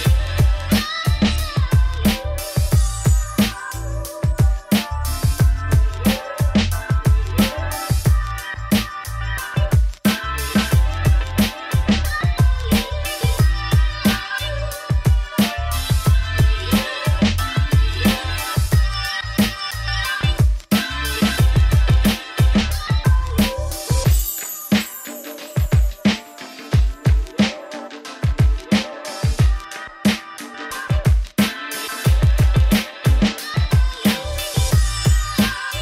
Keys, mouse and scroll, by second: 0.3 2, 0.4 alt+click, 1.3 g, 2.8 ctrl+r, 5.0 2, 5.3 alt+click, 5.6 s, 7.0 Tab, 7.1 scroll down 1, 7.3 click, 7.6 ctrl+s, 7.8 middle click, 8.3-8.7 scroll up 2, 8.7-9.9 drag, 11.2 middle click, 11.8-12.8 scroll up 1, 12.8 scroll up 1, 13.4 middle click, 13.7-14.0 scroll down 1, 14.0 shift+middle click, 14.9 click, 15.1 ctrl+s, 16.0 shift+middle click, 16.6-17.0 scroll up 7, 17.0-18.2 middle drag, 18.3 shift+right click, 18.5 middle click, 23.2 shift+middle click, 23.4-24.8 scroll up 2, 24.8-25.7 scroll up 1, 25.7 scroll up 1, 25.8 click, 28.6 click, 29.2-30.4 middle drag, 32.2 Tab, 33.2 Tab.